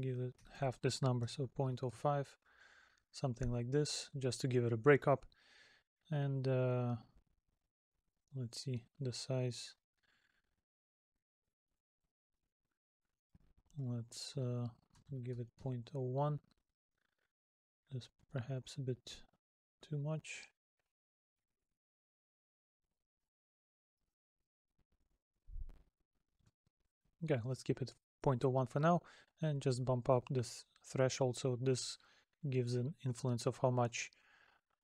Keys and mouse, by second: 3.3 middle click, 5.3 middle click, 11.7 middle click, 16.5 middle click.